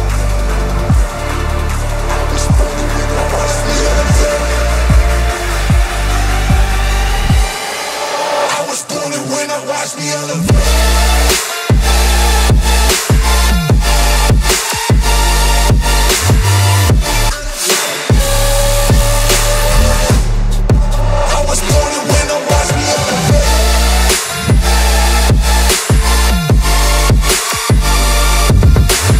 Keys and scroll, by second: 14.7 ctrl+z, 16.4 ctrl+g, 20.8 ctrl+=, 21.0 ctrl+=, 21.2 ctrl+=, 22.7 ctrl+j, 25.2-26.5 typing, 27.5 [, 28.9 ].